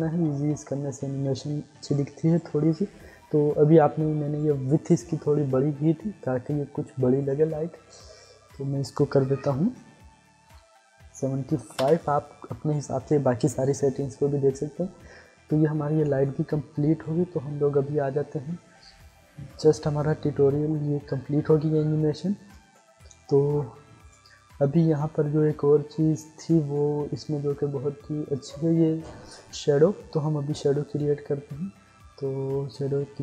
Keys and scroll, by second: 11.1 7, 11.6 5, 11.7 Return.